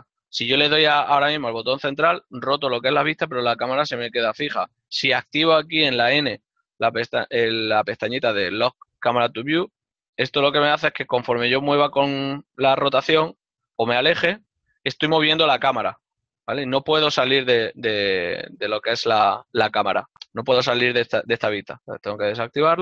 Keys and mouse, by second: 5.6 KP_0, 10.1 click, 12.2 middle click, 15.4 ctrl+z, 17.4 ctrl+z.